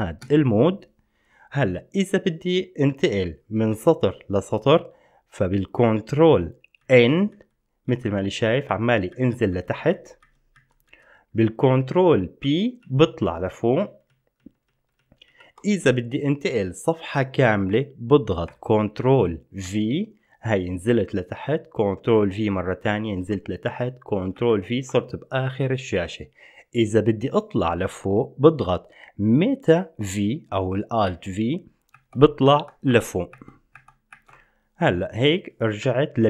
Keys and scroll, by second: 0.0 Escape, 0.4 Escape, 7.0 ctrl+n, 7.5 ctrl+n, 8.1 ctrl+n, 8.4 ctrl+n, 8.9 ctrl+n, 9.7 ctrl+n, 10.1 ctrl+n, 10.7 ctrl+n, 11.0 ctrl+n, 12.6 ctrl+p, 13.0 ctrl+p, 13.4 ctrl+p, 13.7 ctrl+p, 14.0 ctrl+p, 14.6 ctrl+p, 14.9 ctrl+p, 15.2 ctrl+p, 15.5 ctrl+p, 19.9 ctrl+v, 22.3 ctrl+v, 24.5 ctrl+v, 31.3 alt+v, 32.1 alt+v, 32.7 alt+v, 33.1 alt+v, 33.5 alt+v, 34.3 alt+v, 36.0 ctrl+p.